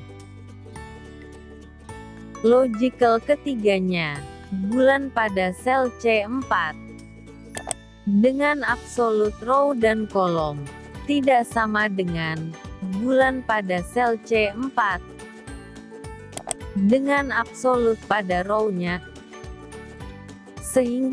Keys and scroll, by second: 8.0 F4, 16.6 F4.